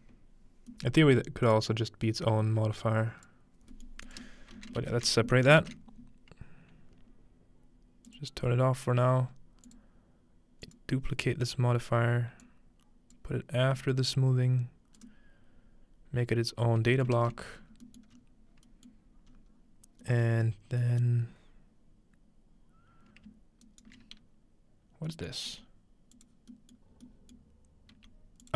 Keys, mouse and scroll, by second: 0.1-0.7 scroll down 2, 0.7-1.7 scroll up 2, 1.5-3.4 drag, 3.6 scroll down 1, 3.8-5.0 middle drag, 4.1 click, 4.6 alt+a, 4.8 ctrl+alt+s, 5.6 ctrl+space, 8.1 click, 9.7 click, 10.7 click, 12.4 click, 13.6 scroll down 1, 13.7 middle click, 14.2-15.5 drag, 17.2 ctrl+middle click, 17.5-18.1 scroll down 2, 18.1 scroll up 2, 19.3 scroll up 2, 19.8 scroll down 1, 20.5 scroll down 1, 21.3 scroll up 1, 22.3-23.3 scroll up 1, 23.6 shift+right click, 25.0-26.5 scroll down 1, 25.5 g, 26.1 click, 27.9 g.